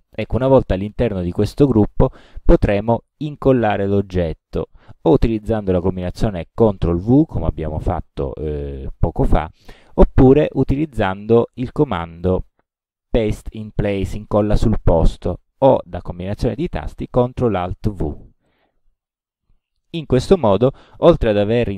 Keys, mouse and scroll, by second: 12.2 click, 18.5 click.